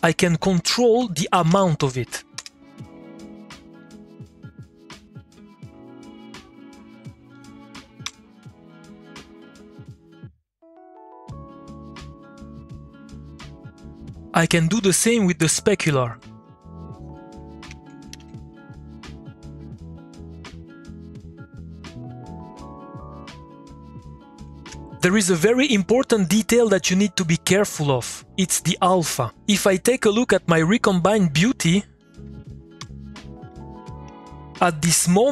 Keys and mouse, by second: 0.6 Tab, 0.7-2.0 typing, 2.0 Down, 2.4 Return, 3.8-7.3 drag, 8.0 2, 9.3-14.7 drag, 15.8 alt+F1, 15.9 ctrl+click, 17.7 ctrl+c, 17.9 click, 18.6 click, 20.2-24.5 drag, 32.0 click, 32.8 2, 34.0 a.